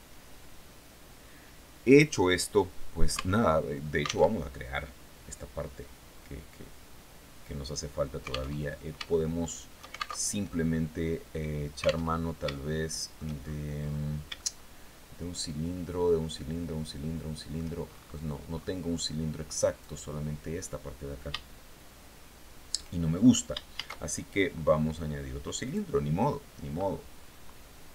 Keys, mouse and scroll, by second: 2.3 scroll down 2, 2.6 Tab, 3.7 alt+Tab, 8.0 alt+Tab, 8.5 shift+click, 9.3 alt+shift+middle click, 9.6 alt+shift+Tab, 11.6 alt+Tab, 12.0 shift+middle click, 12.9-13.5 shift+scroll down 4, 13.8-17.2 shift+middle drag, 17.3-18.3 shift+scroll up 5, 19.2 right click, 22.6-23.0 shift+scroll down 3, 23.2 shift+a, 25.1 click, 27.5-27.9 typing.